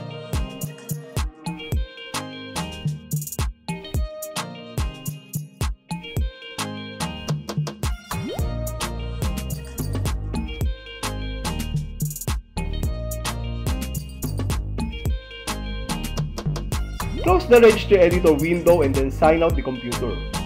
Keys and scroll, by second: 1.7 s, 3.1 s, 5.1 Return, 6.6 Home, 10.8 shift+Right, 16.1 Return, 19.9 shift+Tab.